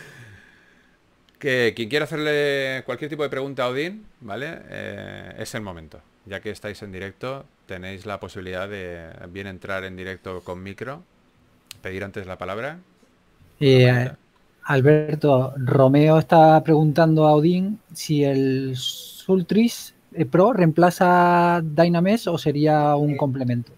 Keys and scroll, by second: 1.7 typing, 3.6-5.0 typing, 6.1 typing, 7.7-9.1 typing, 11.2-12.4 typing, 15.0 4, 18.1 3.